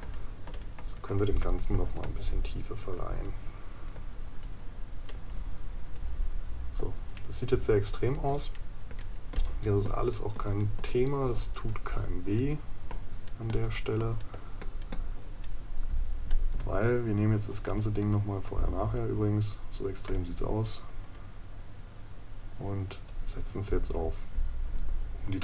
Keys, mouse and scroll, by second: 8.5 right click.